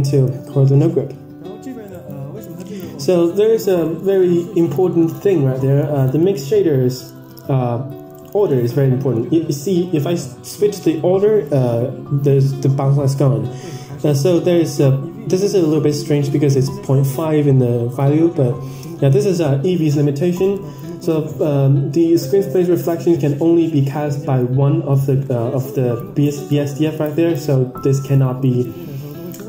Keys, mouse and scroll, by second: 1.8 drag, 2.4 scroll up 4, 2.6 middle click, 3.3-4.4 scroll up 2, 4.5-4.8 middle drag, 6.2-7.2 drag, 10.8 click, 14.4 click, 26.9 click, 27.9-28.6 drag.